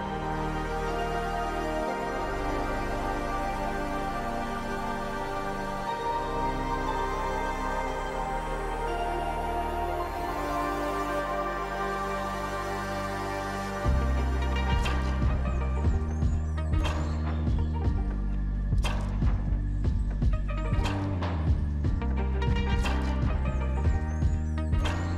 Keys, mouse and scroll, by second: 3.2 ctrl+v, 3.7 BackSpace, 3.8 Home, 3.9 Delete, 4.4 Home, 15.9 right click, 21.3 double click.